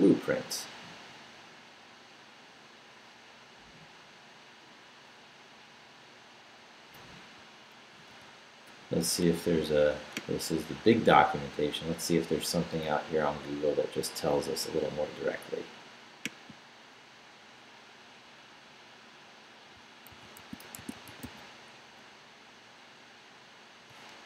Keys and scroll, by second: 7.9 super+f, 20.1 super+f, 20.4 super+s, 20.5-21.7 typing.